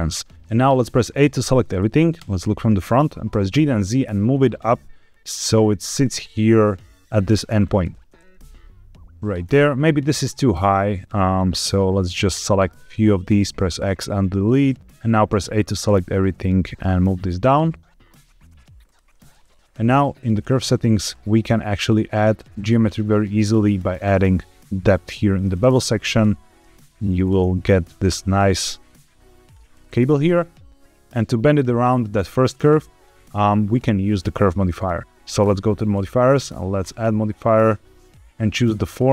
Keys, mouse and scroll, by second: 1.1 Tab, 1.1 shift+middle click, 1.1 a, 2.1 KP_1, 3.2 g, 3.4 z, 5.8 click, 7.9 scroll down 1, 8.1-9.1 shift+middle drag, 11.4 click, 13.2 x, 14.6 click, 14.8 a, 15.2 a, 15.9 g, 15.9 z, 18.7 shift+click, 19.2 middle click, 19.5 Tab, 20.3 click, 20.9-22.0 scroll down 2, 22.0 click, 22.8 scroll down 2, 24.1-25.3 shift+drag, 25.5-26.5 scroll up 5, 26.7 shift+click, 28.0-29.4 shift+drag, 29.7 scroll down 3, 30.1-30.8 shift+middle drag, 33.3-35.3 scroll down 2, 35.3 click, 36.7-39.1 drag.